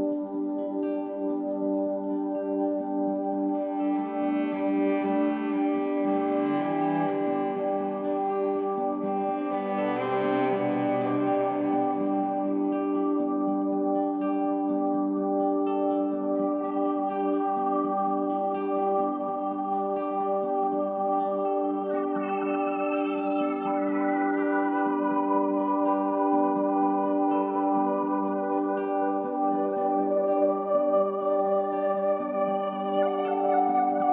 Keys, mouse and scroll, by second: 0.0-8.0 drag, 8.0-9.3 middle drag, 9.3-9.8 scroll up 4, 10.5 click, 11.4-13.3 middle drag, 13.3 click, 14.3-15.3 middle drag, 15.3-16.6 drag, 16.6 Delete, 17.7-20.3 drag, 20.3 middle click, 21.0-21.8 drag, 21.8 Delete, 23.0 shift+a, 27.2 click, 28.9-30.9 middle drag, 30.9-32.2 drag, 32.2 KP_0, 33.2-34.1 middle drag.